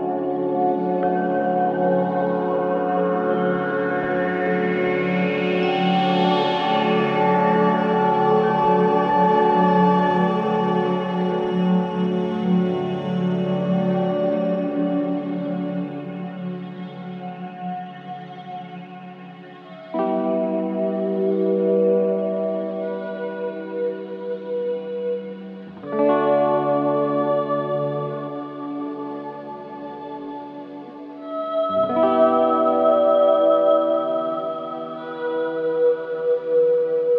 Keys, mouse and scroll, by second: 0.5-5.1 right drag, 5.1 click, 13.3-15.3 scroll up 1, 15.8 click, 18.1 click, 18.7-20.2 scroll down 1, 20.6 ctrl+z, 21.7 click, 22.1 ctrl+z, 30.3 scroll down 1, 30.6 alt+click, 31.7 =, 31.8 =, 33.6 click.